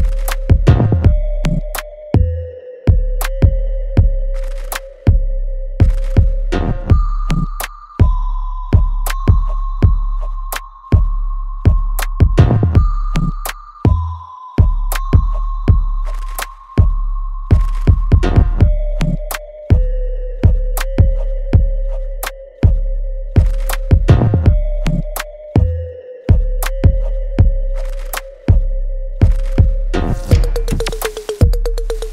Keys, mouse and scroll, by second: 0.0 alt+right click, 0.5-2.8 alt+drag, 2.8 alt+right click, 3.8 f, 4.5 alt+right click, 4.5 alt+right click, 4.9-6.5 alt+drag, 6.5 click, 8.8 alt+click, 8.8 alt+click, 10.0 click, 11.3 alt+right click, 11.7 alt+middle click, 12.2 alt+click, 12.9-14.2 alt+right drag, 14.2-15.6 drag, 15.6 alt+right click, 15.9 alt+click, 16.3 alt+middle click, 16.8-18.2 alt+right drag, 18.2-22.2 ctrl+drag, 22.2 right click, 22.8 click, 23.0 alt+right click, 24.3 click, 24.6 alt+click, 25.4 alt+right click, 25.8-27.1 alt+drag, 27.1 alt+middle click, 27.7 alt+right click, 28.0-30.9 alt+drag.